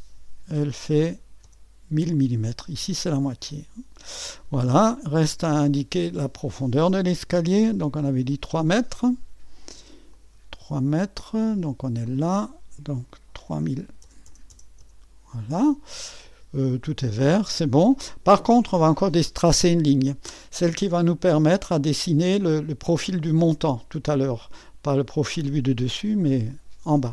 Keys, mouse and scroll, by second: 0.1 KP_5, 0.5 KP_0, 0.9 KP_0, 1.4 Return, 2.5-3.1 scroll down 1, 3.1-4.2 scroll down 1, 4.3-5.0 scroll down 1, 6.0-6.7 typing, 6.2-11.2 drag, 12.0-13.7 drag, 13.7-15.4 typing, 20.7-22.3 scroll up 2, 24.1-27.1 scroll down 1.